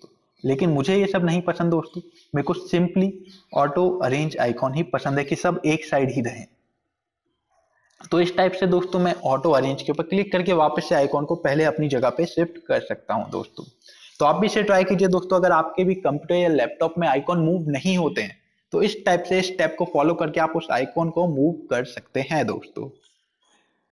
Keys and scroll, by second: 6.3 F5.